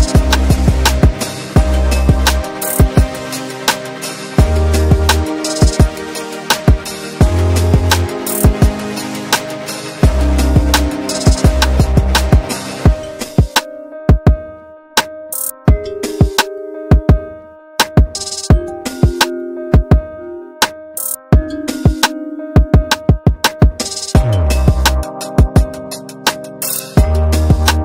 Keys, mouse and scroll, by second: 0.0 ctrl+click, 0.6 ctrl+right click, 1.1 click, 2.7-3.0 typing, 3.5 click, 4.5-5.7 typing, 5.9 click, 7.1-8.3 scroll up 1, 8.3 right click, 10.2 click, 12.6 shift+Page_Down, 14.2 right click, 15.9 click, 17.0-17.5 scroll down 1, 17.5-18.9 scroll up 1, 18.9-20.8 drag, 20.8 scroll up 1, 23.2-24.5 shift+drag, 24.5 scroll up 1, 24.9-26.4 drag, 26.4 scroll down 1, 26.8-27.8 drag.